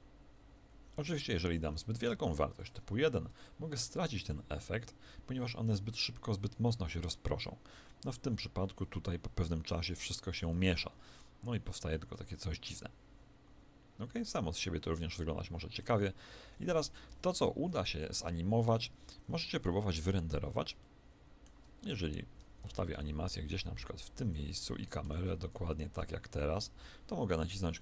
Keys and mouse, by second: 0.9 Escape, 2.4 click, 4.0 alt+a, 10.4-14.2 middle drag, 16.6 Escape, 17.4 KP_1, 19.5-22.6 middle drag, 22.7 click, 25.0 ctrl+shift+KP_0.